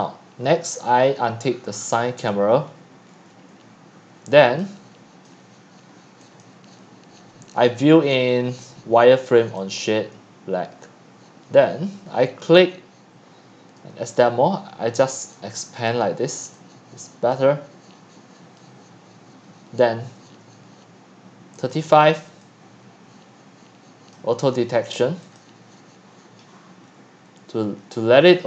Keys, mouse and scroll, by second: 2.3 click, 2.7-3.1 scroll down 7, 3.1-3.7 scroll up 4, 3.7-4.2 scroll down 1, 4.2 click, 4.5-5.2 x, 5.3 click, 5.4 x, 6.4-15.1 drag, 15.3 click, 15.6 middle click, 15.7 scroll down 4, 16.4-17.3 x, 21.6 click, 22.4-23.9 c, 22.9 click, 25.4-26.4 drag, 26.4 middle click, 26.5-27.2 scroll.